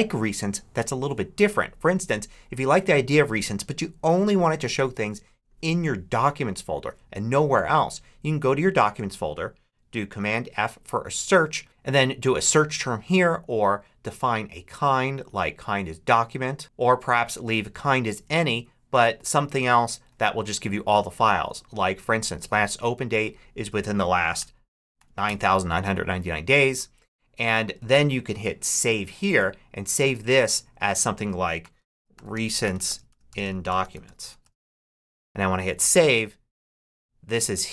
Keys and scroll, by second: 9.9 super+f, 24.2 9, 31.2-35.1 typing.